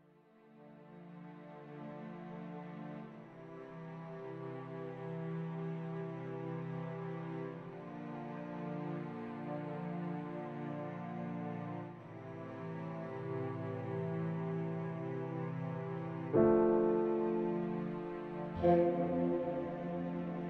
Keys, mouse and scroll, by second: 2.7 click, 8.6 click, 11.0 click, 15.5 shift+middle click, 15.9 middle click, 15.9-17.5 scroll down 1, 17.5 KP_7, 18.4-18.8 scroll down 2, 18.8 shift+middle click, 19.4-20.3 scroll up 7, 20.3 shift+middle click.